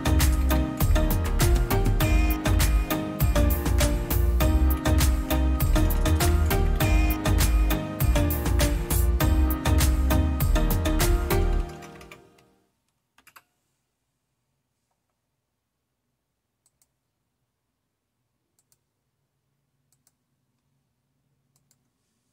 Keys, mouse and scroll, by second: 0.0-0.9 typing, 2.3 Return, 4.6-7.4 typing, 7.9 Return, 11.0-12.5 typing, 13.1 Return, 14.8-16.3 typing, 16.6-18.0 drag, 18.6-19.8 drag, 20.0 click, 21.6 click.